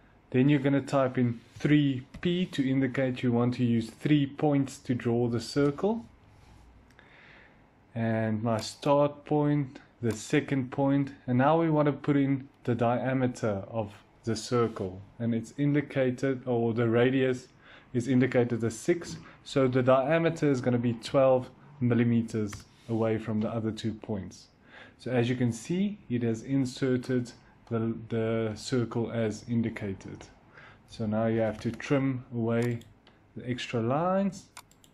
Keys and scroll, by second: 1.4-2.0 typing, 5.4 Return, 20.7-21.7 typing, 22.4 Return, 26.9-27.7 typing, 30.7-32.2 typing.